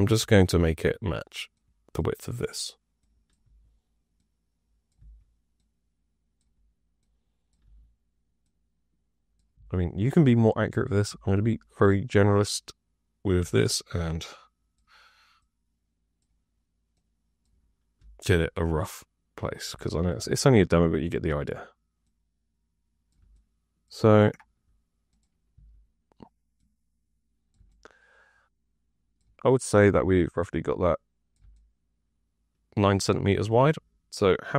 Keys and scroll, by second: 3.3 e, 4.9 w, 7.6 e, 9.5 w, 11.0 r, 13.3 w, 17.9 r, 25.5 w.